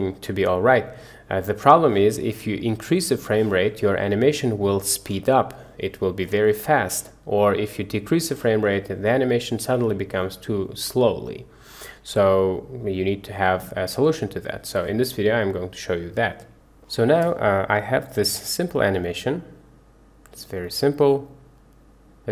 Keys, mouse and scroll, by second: 2.8 click, 8.0 click, 18.2 space.